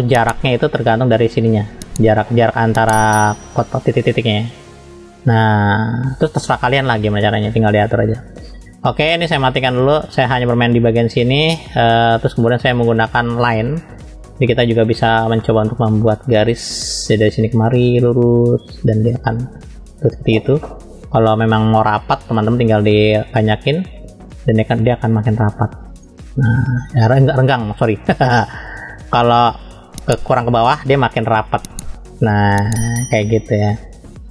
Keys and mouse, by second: 0.7-2.7 drag, 4.2-5.4 drag, 6.2 ctrl+z, 6.4 ctrl+z, 8.7-14.0 drag, 14.4 middle click, 15.4 middle click, 17.5-19.3 drag, 21.2 ctrl+z, 22.2-23.8 drag, 24.6-26.0 drag, 28.9-30.9 drag, 31.7-32.7 drag.